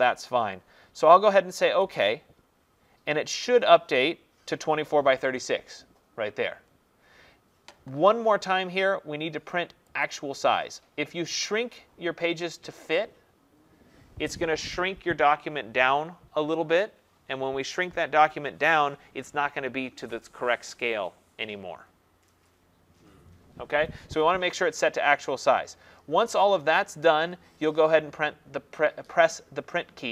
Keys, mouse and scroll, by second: 0.0 click, 10.5-15.1 drag.